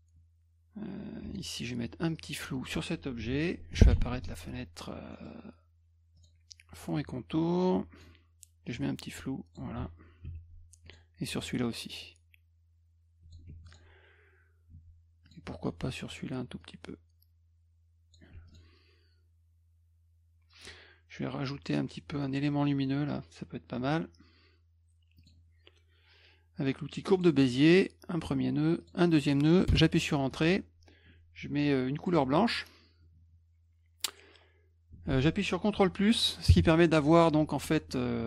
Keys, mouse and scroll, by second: 1.2 F1, 1.9 F2, 2.1 click, 3.8 ctrl+d, 3.8 ctrl+f, 5.1 middle click, 6.2 click, 7.6 click, 8.7 click, 10.8 click, 12.0-13.3 drag, 13.5 F1, 13.7 click, 14.7 F2, 15.2 click, 16.6-18.1 drag, 18.3 F1, 18.5 click, 25.2 click, 27.1 click, 28.8 click, 29.7 Return, 32.0 click, 34.9 F2.